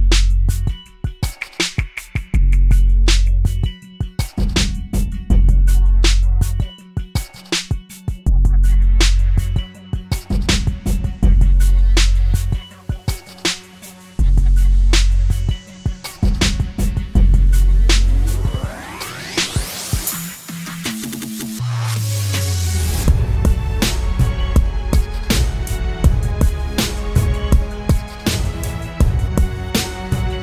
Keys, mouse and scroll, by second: 17.7 double click.